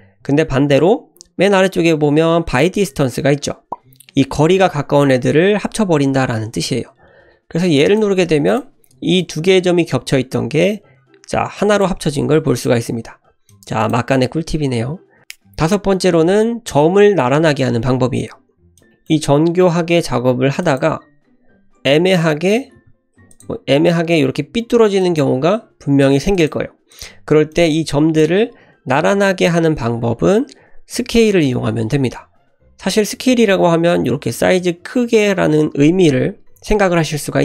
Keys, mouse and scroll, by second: 8.4 click, 9.2 click, 10.5 g, 12.0 ctrl+z, 12.5 click, 13.4 click, 18.8 click, 18.9 shift+middle click, 19.1-19.4 scroll down 1, 19.4 e, 21.5 e, 23.6 e, 25.7 e, 26.9 click, 27.5 click, 33.7 s.